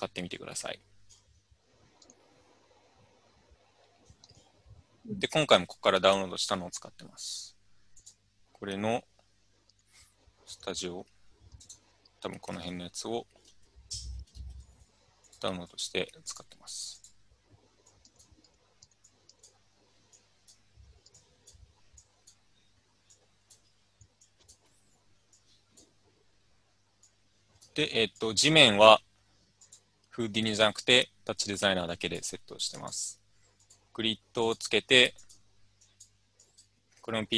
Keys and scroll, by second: 12.7 alt+Tab, 13.5 alt+Tab, 14.1 alt+Tab, 14.4 alt+Tab.